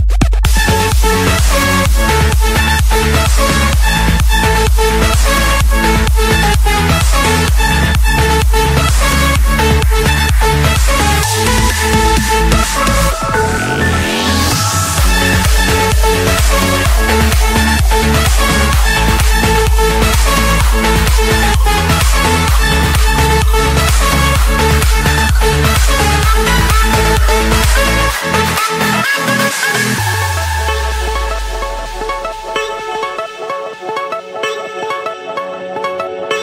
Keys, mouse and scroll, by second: 0.0-1.3 typing, 2.4 Return, 4.0-5.1 drag, 5.4-6.5 drag, 7.2-8.3 drag, 9.3 Escape, 10.1 click, 12.1 right click, 13.1 right click, 13.8-14.9 drag, 15.0-16.1 drag, 17.3 click, 22.0 click, 22.5-22.9 scroll, 22.9 Escape, 23.5 click, 24.2 click, 25.6-26.7 typing, 27.7 Return, 31.0 click, 32.8-34.8 typing, 35.8 Return.